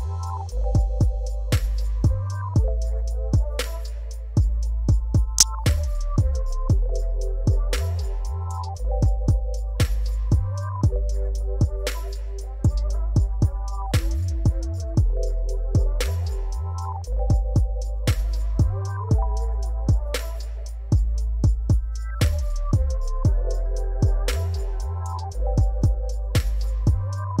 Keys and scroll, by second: 0.1 m, 0.4 i, 8.5 alt+a, 11.3 shift+z, 12.1 shift+z, 12.8 shift+d, 12.9 shift+z, 15.0 g, 15.1 z, 15.6 alt+a, 16.2 ctrl+z, 16.4 r, 18.1 shift+d, 18.3 shift+z, 19.4 r, 20.1 Tab, 20.4-23.4 typing, 22.1 Tab, 24.6 alt+a.